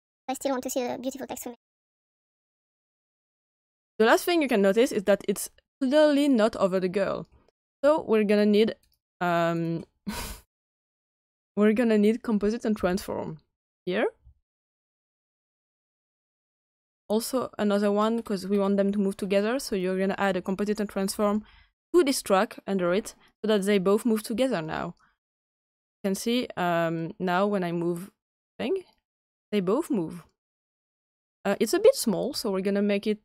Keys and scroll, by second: 12.7 c.